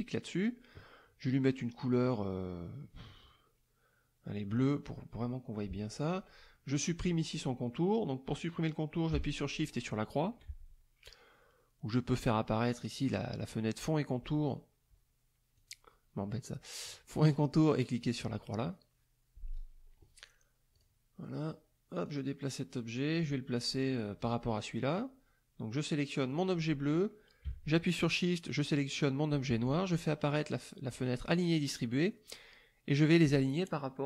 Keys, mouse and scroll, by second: 4.6 click, 9.7 shift+click, 12.8 click, 15.6 click, 17.3 click, 17.9 click, 20.7 click, 22.0-23.3 drag, 24.2 click, 26.3 click, 28.5 shift+click, 30.9 click.